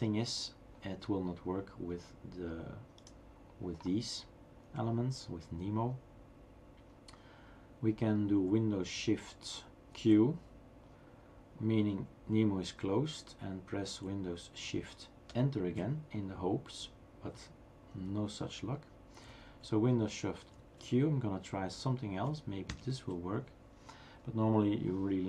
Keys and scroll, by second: 9.9 shift+super+q, 15.6 shift+super+Return, 20.6 shift+super+q, 22.9 super+Return.